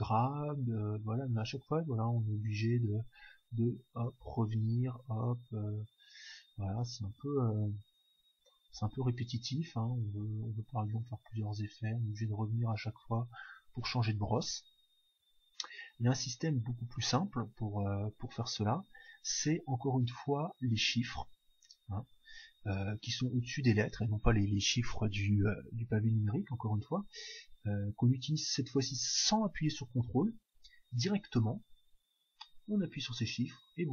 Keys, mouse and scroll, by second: 10.0 middle click, 10.3-14.4 drag, 32.7 1.